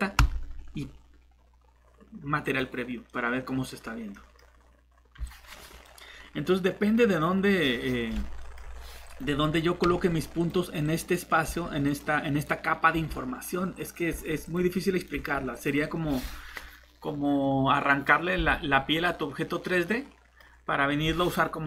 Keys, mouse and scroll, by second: 2.4 click, 3.1 middle click, 5.2 click, 7.6 middle click, 9.0 click, 12.7 scroll down 1, 13.7 click, 19.0 middle click.